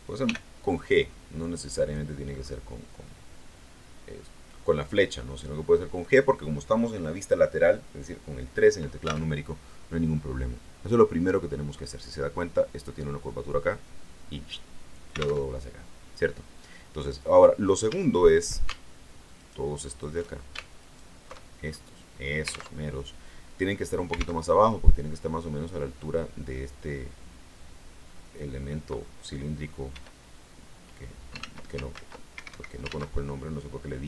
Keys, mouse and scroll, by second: 0.2 g, 1.7 click, 2.2-5.1 scroll down 2, 5.1 scroll up 2, 5.7 scroll down 2, 9.2 alt+Tab, 15.4 alt+Tab, 17.8 a, 19.3 alt+shift+right click, 19.8 alt+shift+right click, 20.7 alt+shift+right click, 21.6 alt+shift+scroll down 2, 22.6 alt+Tab, 24.3 alt+Tab, 29.8 e, 31.3 ctrl+z, 32.2 ctrl+Escape, 32.8 ctrl+z.